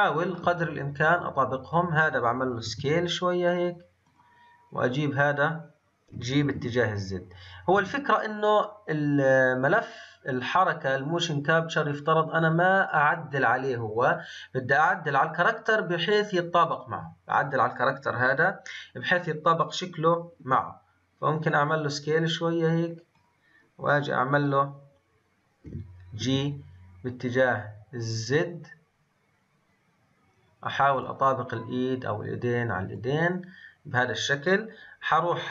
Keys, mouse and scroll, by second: 0.3 shift+scroll down 1, 1.7 click, 2.6 s, 4.8 click, 13.6 scroll up 2, 33.9-35.4 scroll down 2, 35.4-35.5 drag.